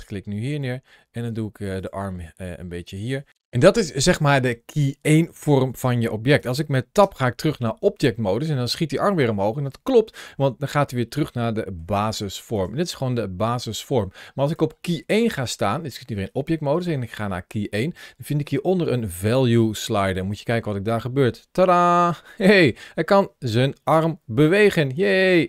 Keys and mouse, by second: 0.4 r, 1.6 click, 1.9 g, 2.7 click, 6.9 Tab, 10.1-11.7 middle drag, 20.2-25.4 drag.